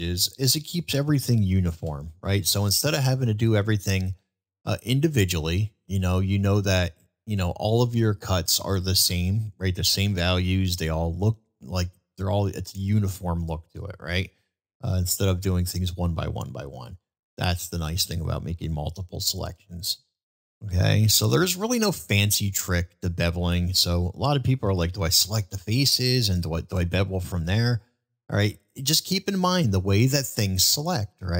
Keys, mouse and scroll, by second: 1.8 ctrl+b, 17.7-18.1 middle drag, 19.2-19.5 shift+middle drag, 20.0-20.5 middle drag, 21.0 shift+middle drag, 26.7 ctrl+b.